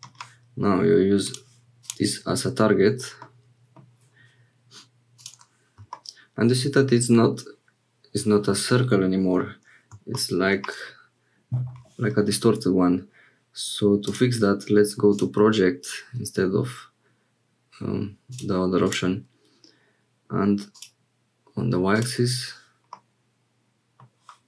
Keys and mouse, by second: 3.2 click, 5.1 click, 14.1-15.1 drag, 18.4 click, 20.7 click, 21.9 click, 22.9-24.0 middle drag, 24.0 click.